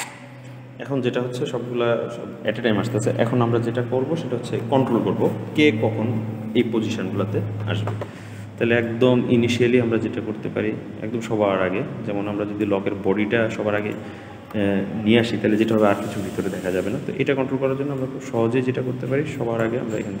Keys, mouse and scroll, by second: 8.7-11.7 drag, 13.6 click, 17.8-20.2 drag.